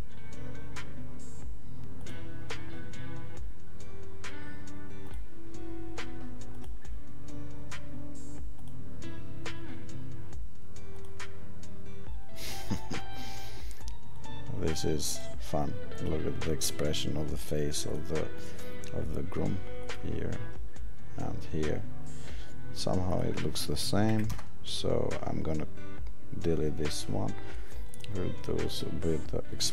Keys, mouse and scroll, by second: 5.0 click, 8.6 click, 19.8 click.